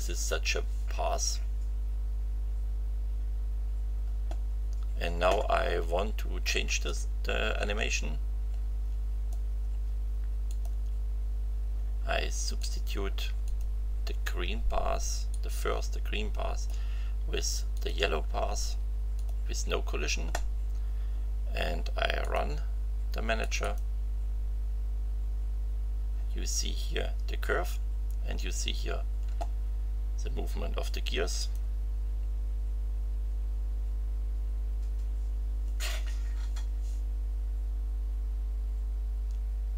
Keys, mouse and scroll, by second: 6.8-9.5 drag, 10.4 click, 12.6 click, 13.4 click, 15.3-16.8 drag, 17.7 click, 19.1 click, 22.2 click, 23.4 click, 31.3 click.